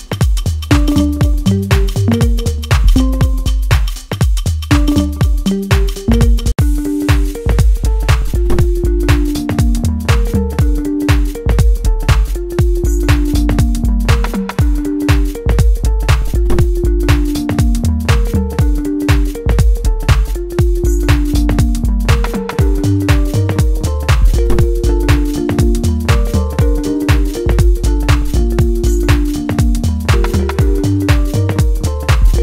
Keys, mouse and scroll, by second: 2.0-3.4 middle drag, 3.4-5.1 shift+drag, 5.1-9.0 middle drag, 9.0 click, 9.5-15.9 middle drag, 15.9-17.3 drag, 17.3-18.9 middle drag, 18.9 scroll down 1, 19.5-21.4 middle drag, 21.4 click, 22.8-25.3 middle drag, 25.3 scroll up 1, 25.9 click, 29.0 click, 30.0-32.4 middle drag.